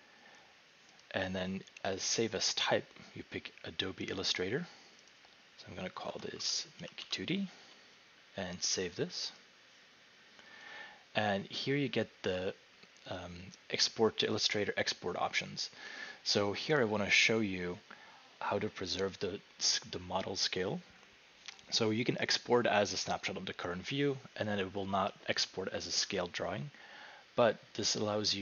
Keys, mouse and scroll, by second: 1.0 click, 2.3 click, 5.1 click, 5.8-7.5 typing, 9.4 click, 11.7-12.4 drag.